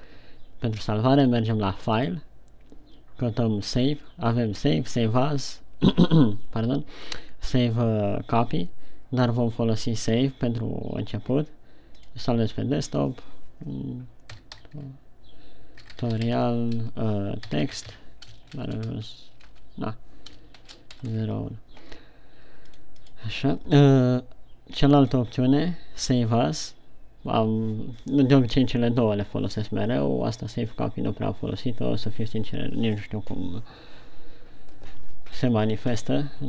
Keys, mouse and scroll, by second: 2.3 click, 24.0 click, 25.4 click.